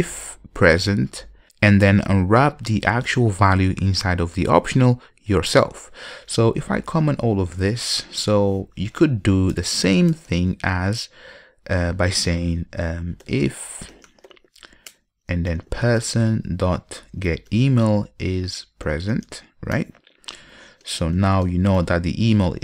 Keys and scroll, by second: 7.0 super+/, 15.1 Return.